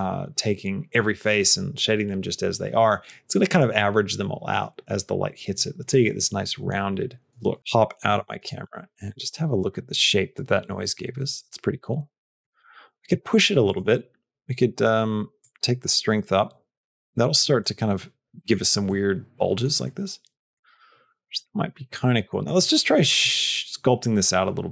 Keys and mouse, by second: 7.6 middle click, 8.5-12.2 middle drag, 15.5-17.2 drag, 17.4 middle click, 18.7 middle click, 19.7 middle click, 20.5-22.4 middle drag, 22.4 middle click, 23.2-24.7 middle drag.